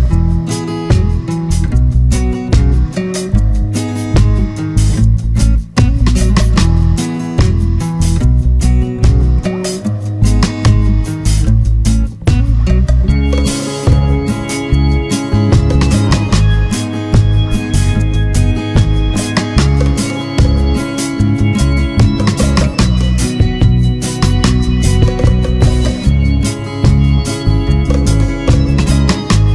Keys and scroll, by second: 1.0 ctrl+-, 5.4 ctrl+=, 10.3 ctrl+z, 18.9 ctrl+z, 20.7 Return, 23.8 ctrl+z.